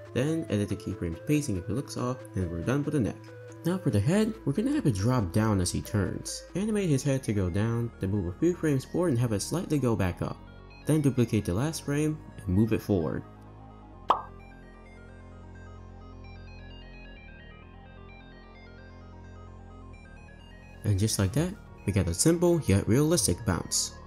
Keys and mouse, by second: 0.0 space, 0.3 click, 0.5 space, 1.9 space, 4.0 click, 4.9-5.6 middle drag, 10.7 space, 10.8 space, 11.3 r, 12.5 space, 12.6 space, 12.7 r, 14.2-14.8 middle drag, 14.5 drag, 14.5 right drag, 15.1 r, 15.7 Right, 15.8 Right, 15.9 Right, 16.4 r, 17.7 click, 17.9 shift+d, 19.0 click, 19.4 space, 19.9 space, 20.3 click, 20.8 space, 22.2 click, 22.2 space, 23.0 click, 23.8 click.